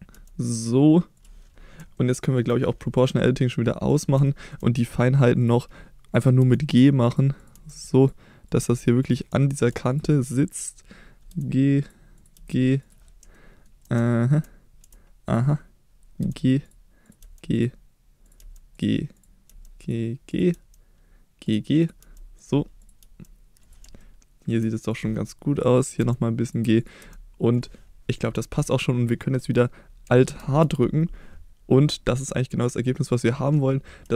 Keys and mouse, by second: 0.1 g, 1.1 click, 1.9 shift+middle click, 3.9 click, 4.2 shift+middle click, 6.4 g, 7.1 click, 7.3 click, 7.5 g, 8.0 click, 8.4 click, 8.6 g, 9.0 click, 9.4 shift+middle click, 9.9 click, 11.3 g, 11.8 click, 12.1 click, 12.3 g, 12.8 click, 13.3 shift+middle click, 14.0 middle click, 15.3 click, 16.2 g, 16.6 click, 17.2 g, 17.5 click, 18.4 g, 18.7 click, 19.1 click, 19.5 g, 19.8 click, 20.5 g, 21.4 click, 21.8 click, 22.0 g, 22.4 click, 23.0 g, 23.6 click, 24.0 shift+middle click, 26.0 g, 26.4 click, 27.0 g, 27.5 click, 30.2 alt+h.